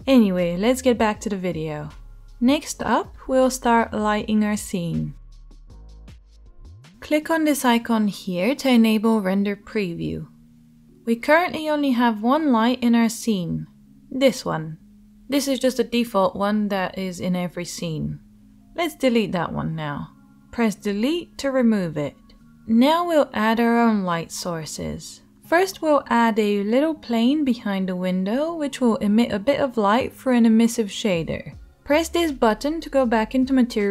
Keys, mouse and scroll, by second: 7.1-12.9 shift+drag, 7.1 shift+h, 12.9-20.8 shift+middle drag, 15.0 g, 20.8 Delete, 20.8-33.9 drag.